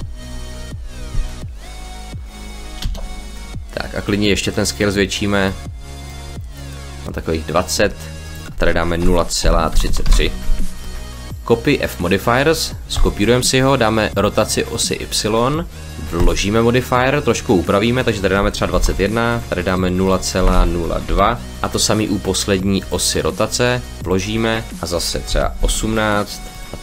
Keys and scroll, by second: 2.7 space, 8.8 0, 9.3 ., 9.6 3, 9.9 Return, 18.6 2, 19.2 1, 20.2 BackSpace, 20.9 2, 25.1 1, 25.4 8.